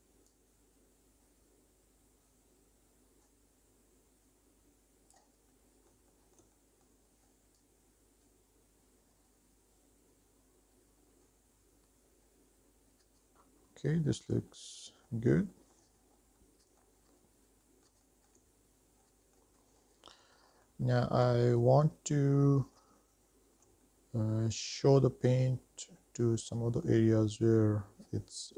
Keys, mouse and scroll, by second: 0.6 shift+middle click, 0.8 click, 1.7 middle click, 2.0 shift+middle click, 2.4-4.0 drag, 4.2 middle click, 4.3 shift+middle click, 4.5 middle click, 4.8-6.8 drag, 6.9 shift+middle click, 7.5-9.4 drag, 9.5 middle click, 9.7 shift+middle click, 10.0 middle click, 10.2 click, 11.2 middle click, 11.4 click, 11.9 middle click, 12.1 click, 12.6 middle click, 12.9 scroll down 2, 13.1 shift+middle click, 13.3 scroll up 3, 13.7 middle click, 14.7 scroll down 1, 14.8 shift+middle click, 15.4 middle click, 15.8 shift+middle click, 16.3-17.1 scroll up 2, 16.7 middle click, 17.4-17.9 scroll down 2, 17.9 middle click, 18.3 shift+middle click, 19.0 scroll up 1, 19.4 middle click, 20.0 shift+middle click, 20.8 middle click, 21.2 shift+middle click, 22.0-22.5 scroll up 4, 22.6 middle click, 23.7 shift+middle click, 24.4 middle click, 25.8-27.7 middle drag.